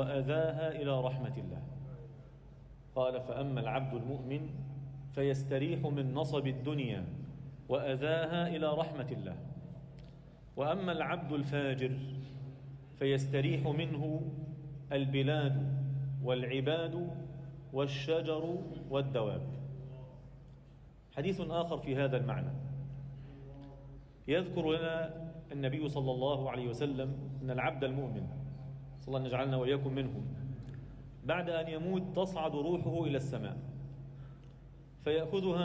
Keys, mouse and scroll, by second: 2.7-3.2 scroll down 3, 3.7-4.2 scroll up 1, 4.3 alt+middle click, 4.9 scroll down 2, 5.2 alt+shift+middle click, 6.0 KP_1, 6.5 z, 6.9 scroll up 1, 7.3 shift+middle click, 7.7-8.7 scroll up 1, 8.7 e, 11.9-12.8 scroll down 2, 12.8-13.3 scroll up 1, 13.3 g, 15.6 z, 16.1 alt+middle click, 16.7-17.4 scroll down 1, 17.4 f, 20.2-20.7 scroll down 2, 20.3 Tab, 20.9 alt+middle click, 24.4 Tab, 24.8 alt+shift+middle click, 24.8 scroll up 1, 25.6 ctrl+r, 28.0 3, 28.7 click, 28.9 click, 29.4 scroll down 2, 29.9 shift+d, 31.1 p, 31.9 Tab, 32.4 click, 32.9 Tab, 32.9-33.4 scroll up 1, 33.4 alt+shift+middle click, 34.1 1, 34.5 a, 35.5 alt+e.